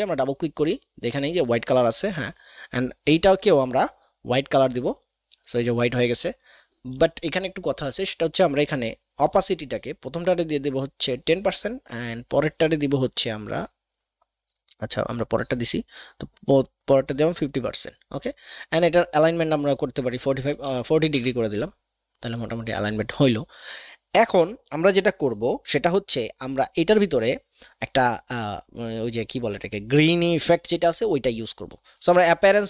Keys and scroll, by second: 20.6 KP_4, 20.7 KP_0, 21.1 Return.